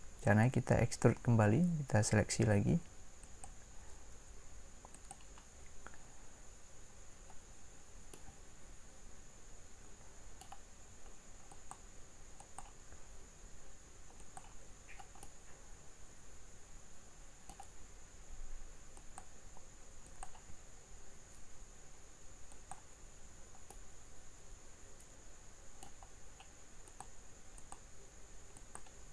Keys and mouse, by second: 0.3-3.2 drag, 8.1-10.1 middle drag, 15.9-20.6 middle drag, 23.7 click, 24.3-25.6 middle drag.